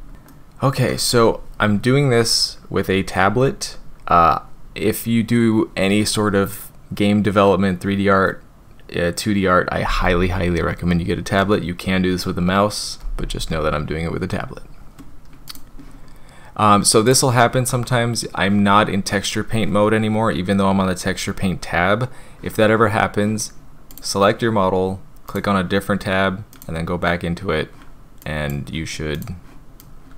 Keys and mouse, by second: 0.3 middle click, 15.5 click, 26.5 click, 28.2 click, 29.8 click.